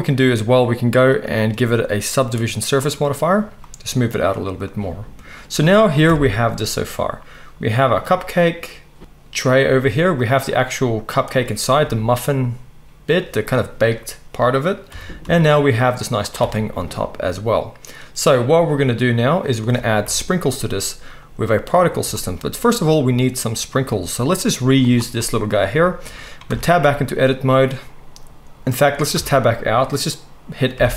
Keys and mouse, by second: 1.7-10.3 drag, 6.0 KP_1, 10.3-11.3 middle drag, 11.3 click, 11.4-24.8 middle drag, 11.8 s, 14.9 g, 16.4 alt+a, 20.0 KP_1, 24.8 click, 24.9-30.9 middle drag, 26.4 Tab, 29.1 Tab, 30.8 F3.